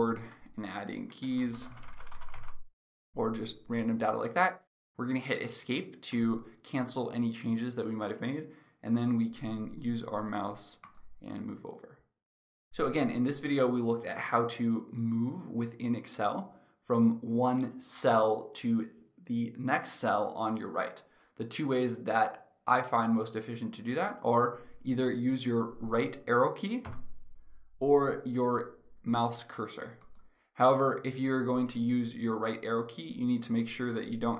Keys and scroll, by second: 0.3 Right, 6.2 Escape, 26.7 Right.